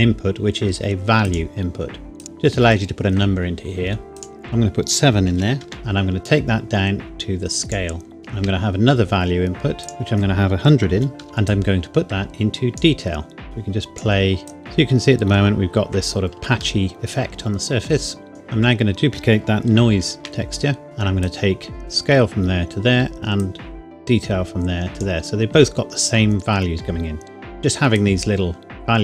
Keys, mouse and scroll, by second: 1.2 click, 4.1 click, 5.3 KP_7, 5.6 KP_Enter, 6.2 click, 8.2 shift+d, 9.8 click, 10.9 KP_1, 11.4 click, 14.7 scroll up 1, 15.8-16.6 scroll down 1, 16.8 shift+middle click, 18.3 click, 18.7-19.3 scroll down 1, 19.9 shift+d, 21.2 click, 22.2-23.4 scroll down 1, 23.4 click, 26.5-27.1 scroll up 1, 28.0 click.